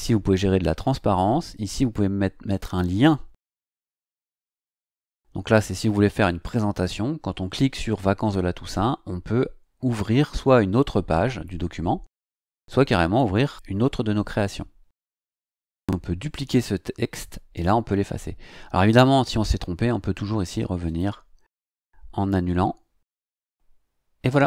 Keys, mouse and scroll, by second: 1.5 click, 15.0 click, 18.8 click, 20.8 click.